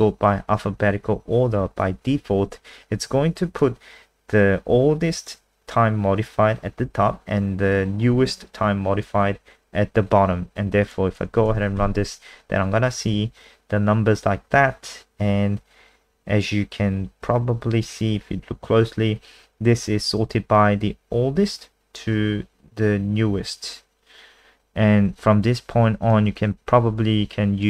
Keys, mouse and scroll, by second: 11.5 ctrl+s, 11.8 F5, 26.1 super+click.